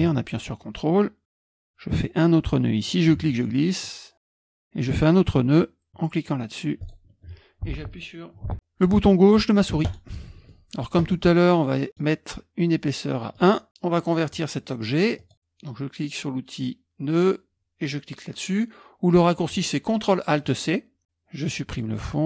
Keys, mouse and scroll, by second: 2.8 click, 4.0 ctrl+click, 6.8 ctrl+click, 10.6-13.3 middle drag, 13.3 click, 15.2 click.